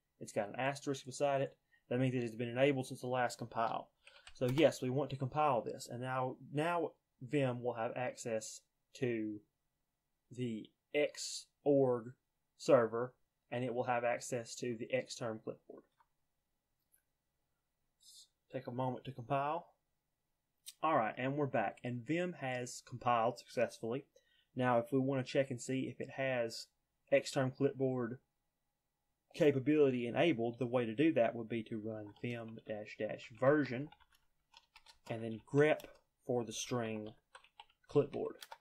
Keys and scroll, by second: 3.8-4.8 typing, 31.5-38.5 typing.